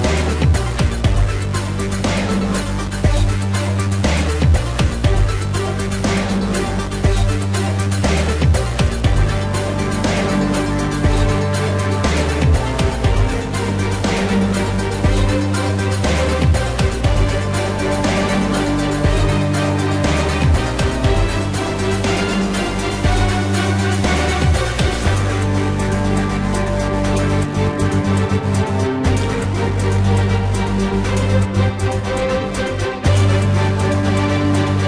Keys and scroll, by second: 12.2 ctrl+-, 13.8 ctrl+-, 17.6 ctrl+-, 19.3 ctrl+-, 23.3 ctrl+-, 23.7 space, 24.3 ctrl+-, 28.2 space, 30.1 space, 31.0 ctrl+=, 31.6 space, 31.8 ctrl+=, 32.1 [, 33.4 space.